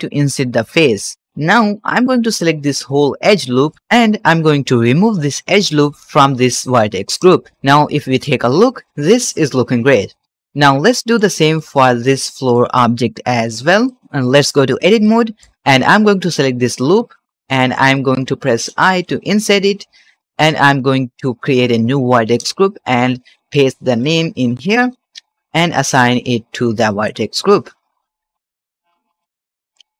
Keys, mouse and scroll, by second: 1.2 alt+a, 1.2 alt+click, 1.8 2, 2.2 alt+click, 3.1 middle click, 7.1 click, 7.5 ctrl+Tab, 10.0 ctrl+Tab, 10.4 shift+middle click, 10.7-11.1 shift+middle drag, 11.3 scroll up 2, 11.5 shift+middle click, 12.0 scroll down 1, 12.2 middle click, 12.9 click, 13.3-13.7 shift+middle drag, 13.7 middle click, 14.7 Tab, 14.9 middle click, 15.5 ctrl+z, 16.9 alt+click, 17.4 middle click, 17.7-18.9 shift+scroll up 4, 17.8 shift+middle click, 18.9 i, 20.3 shift+click, 22.2-22.6 drag, 23.2-24.8 drag, 26.9 click, 27.7-28.2 scroll down 2, 28.5 ctrl+Tab, 29.1 middle click.